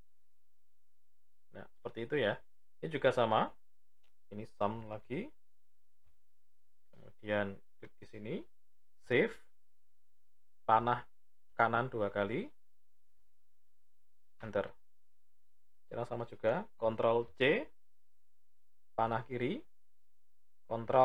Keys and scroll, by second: 16.6 ctrl+c, 19.0 Left, 20.4 ctrl+Down.